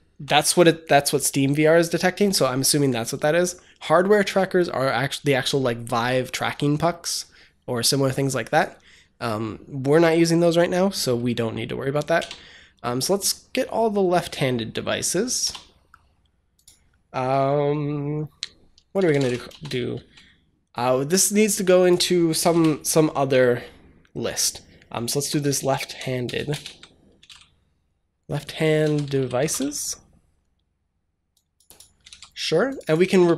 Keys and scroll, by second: 12.0 Return, 15.3 BackSpace, 18.6-19.5 typing, 22.3 typing, 24.5-29.9 typing, 31.9 ctrl+c, 32.9 ctrl+v, 33.1 ctrl+s.